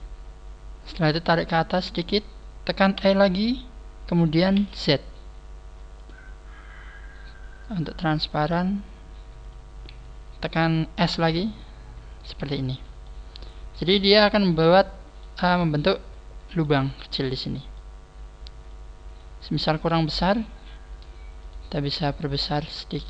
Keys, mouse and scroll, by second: 0.9 click, 6.0 click, 8.3 click, 9.5 click, 12.3 click, 12.4 z, 12.7-13.1 scroll down 3, 13.0 middle click, 14.8-15.1 scroll up 3, 15.2 middle click, 17.0 middle click, 18.7 click, 19.4 middle click, 20.7 scroll up 1, 21.4 right click, 21.4 scroll up 2, 22.0 middle click.